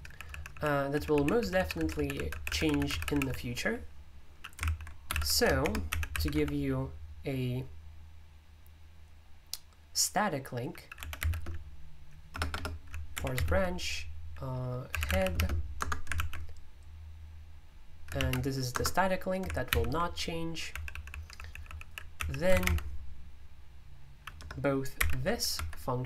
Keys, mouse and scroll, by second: 0.0-6.8 typing, 11.0 p, 14.7-16.6 typing, 15.7 Return, 18.1 ctrl+v, 18.7 Return, 19.7 super+l, 20.7-22.6 typing, 25.0-26.0 typing.